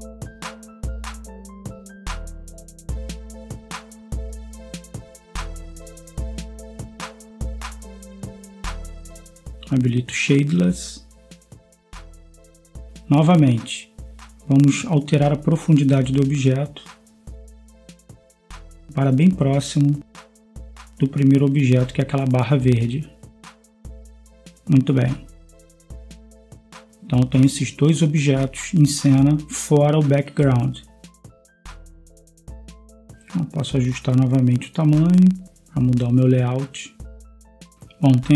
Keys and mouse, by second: 1.9-19.4 drag, 21.3-23.0 drag, 23.6 middle click, 23.8-26.0 middle drag, 27.8-29.4 drag, 29.4 KP_0, 31.4-35.3 drag, 36.4 Escape, 38.1-38.3 right drag, 38.1 s.